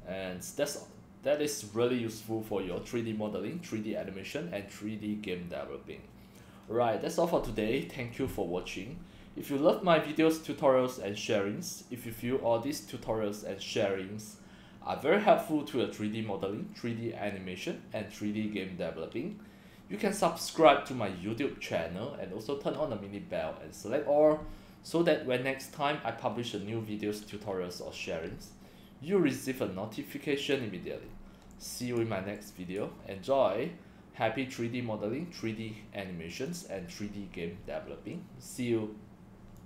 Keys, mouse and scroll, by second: 9.1-10.0 drag, 30.5 click, 30.7-31.1 scroll up 1, 31.6-32.0 drag, 32.4-32.8 right drag, 33.5-35.4 middle drag, 36.5 click, 39.6 click.